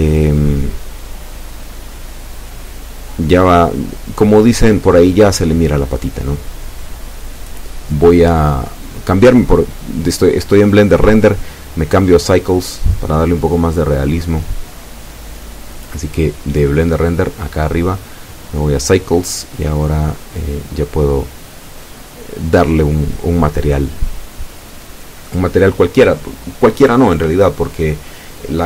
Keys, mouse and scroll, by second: 0.3 Tab, 1.4-2.1 scroll up 2, 2.1 scroll down 2, 4.2-4.5 scroll down 2, 4.8-5.9 drag, 5.9-6.5 scroll up 2, 6.9-9.4 shift+drag, 9.4-10.0 scroll down 2, 10.5-11.6 drag, 13.9 right click, 14.8 middle click, 15.7 click, 26.0 click, 26.8 click.